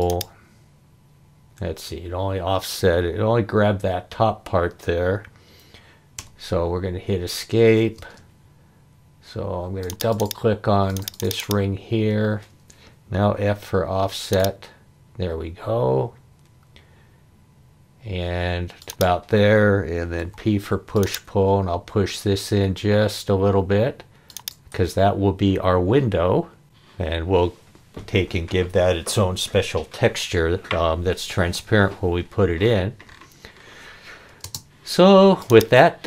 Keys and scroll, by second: 6.2 Escape, 8.0 space, 13.2 f, 20.2 p, 34.4 space.